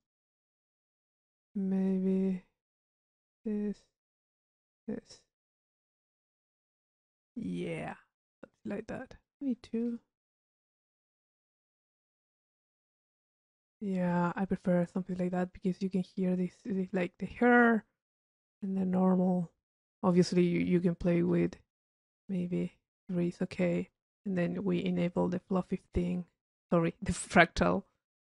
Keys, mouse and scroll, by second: 2.2-7.6 drag, 9.4 click, 12.5 click, 21.6 click, 23.8 click, 25.2 click, 26.7 click.